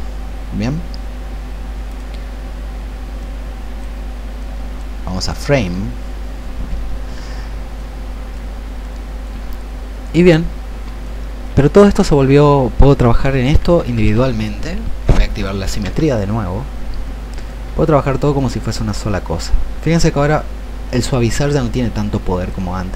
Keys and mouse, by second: 18.2 shift+click, 20.0-22.5 shift+drag.